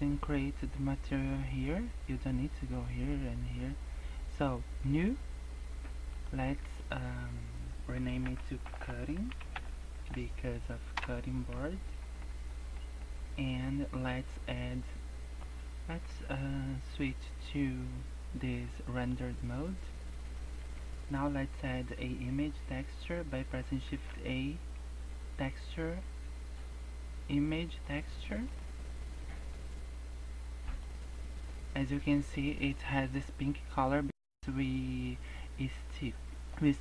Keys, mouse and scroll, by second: 4.7 click, 6.1 click, 6.6 click, 8.7 t, 11.8-12.4 scroll down 13, 12.5 middle click, 12.8-14.1 scroll up 5, 14.1 scroll up 3, 18.9 click, 23.8 shift+a, 29.5 click.